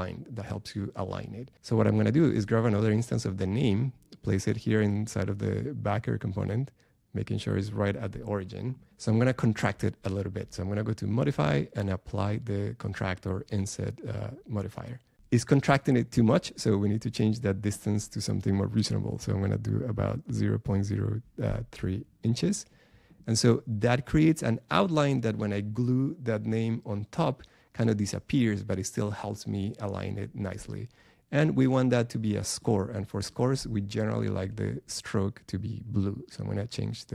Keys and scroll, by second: 1.6 BackSpace.